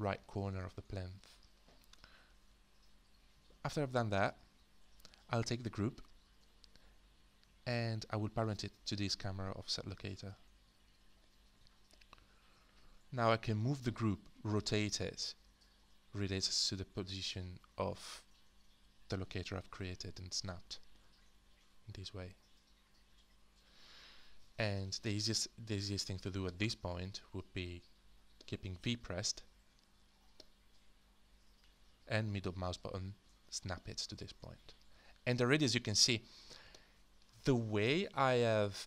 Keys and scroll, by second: 31.5-35.2 typing.